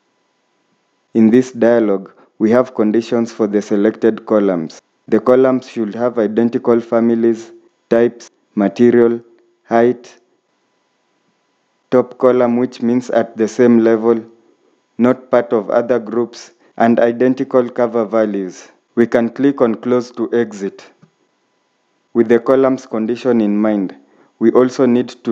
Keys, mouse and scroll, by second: 24.3 scroll up 1.